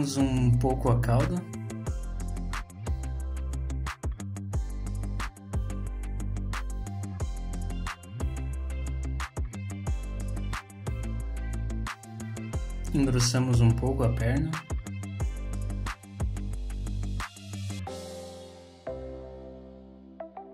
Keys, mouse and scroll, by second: 0.1 shift+click, 0.4 click, 0.7 shift+click, 1.0 click, 1.3 click, 1.6 shift+click, 1.9-2.3 scroll up 3, 2.1 shift+middle click, 2.3 shift+middle click, 2.9 click, 3.1 shift+click, 3.4 click, 4.9-5.3 scroll down 2, 5.1 middle click, 5.8 middle click, 7.8-8.1 scroll down 2, 7.9 middle click, 8.5-9.0 scroll down 2, 8.8 middle click, 10.7-11.1 scroll up 1, 11.1 middle click, 12.4 click, 13.3-13.7 scroll up 2, 14.6 shift+click, 14.9 shift+click, 15.3 middle click, 15.7 shift+click, 15.9 middle click, 16.6 click, 17.5 click, 18.7 middle click, 19.5 click, 20.0 middle click.